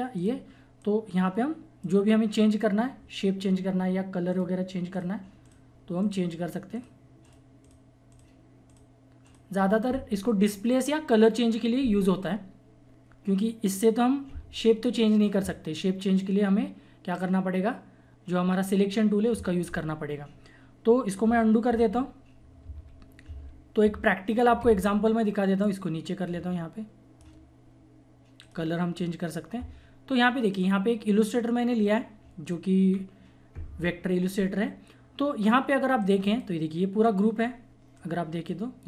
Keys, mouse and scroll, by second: 4.3 click, 21.6 ctrl+z, 22.6 ctrl+z, 25.6-28.4 drag, 28.4 click, 32.9-34.4 scroll down 1, 34.4 scroll down 1, 37.2-38.8 drag.